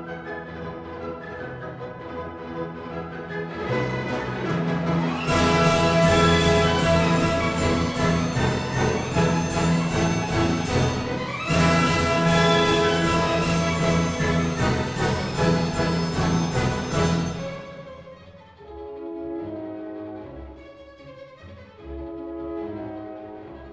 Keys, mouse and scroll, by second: 0.5 click, 1.6 click, 2.5-3.3 ctrl+scroll, 3.9 click, 4.7 click, 5.9-6.5 typing, 7.1 Return, 8.8 ctrl+scroll, 9.6 Escape, 10.2-10.6 scroll, 11.8 click, 13.2 click, 13.9-15.1 scroll, 15.5 click, 16.1-16.5 scroll, 16.7 s, 17.7 click, 19.1 click, 20.0 click, 21.4 click, 22.3 click.